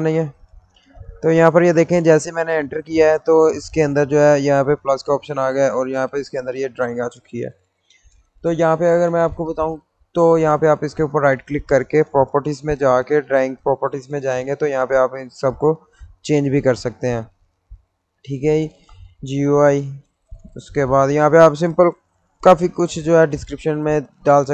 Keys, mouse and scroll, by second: 4.7 click, 10.8 right click, 12.2 click, 18.3-19.6 typing, 20.6 Tab.